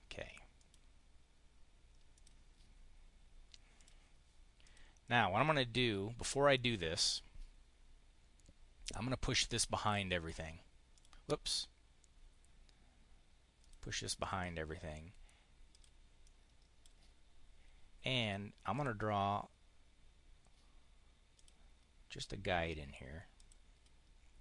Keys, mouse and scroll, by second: 0.4 click, 2.0 click, 3.5 click, 4.5 click, 9.7 click, 10.8 click, 11.3 click, 13.5 click, 14.0 click, 15.6 click, 16.1 click, 18.6 click, 21.2 click, 23.2 click.